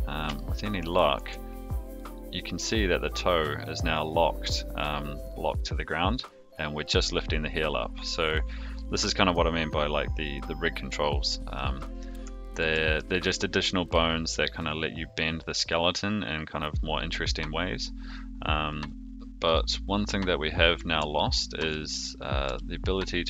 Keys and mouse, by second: 0.3-0.8 shift+middle drag, 1.1 r, 12.6 ctrl+z, 21.1-21.6 shift+middle drag, 22.4 g.